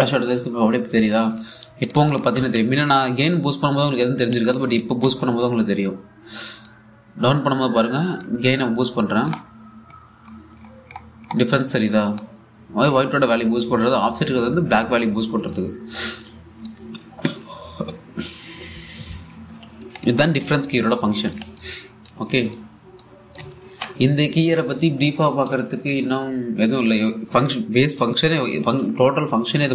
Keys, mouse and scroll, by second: 1.6 click, 3.0 1, 5.0 click, 5.7 1, 7.3-9.6 drag, 10.3-10.6 scroll up 1, 12.8-14.7 drag, 14.9-18.3 drag, 20.6 click, 21.1 1, 21.8 scroll down 1, 22.0-24.2 alt+drag, 24.3 shift+x.